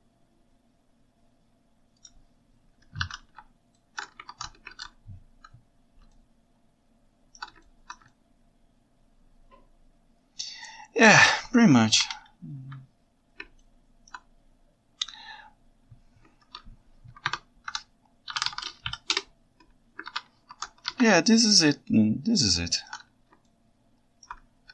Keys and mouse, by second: 3.8 ctrl+shift+middle click, 4.3 ctrl+Tab, 4.8 alt+z, 6.2 ctrl+shift+middle click, 6.4 ctrl+shift+right click, 6.7-7.1 ctrl+shift+middle drag, 7.1 ctrl+shift+right click, 7.7 ctrl+alt+right drag, 8.1-8.9 ctrl+shift+right drag, 8.9-10.9 ctrl+shift+middle drag, 10.9 ctrl+shift+right click, 12.0 KP_1, 12.5 KP_9, 13.6-14.1 ctrl+alt+drag, 17.3 F3, 20.1 alt+a, 20.5 ctrl+Tab, 20.9 alt+a, 21.9-22.9 ctrl+shift+right drag, 23.5-24.3 ctrl+alt+right drag.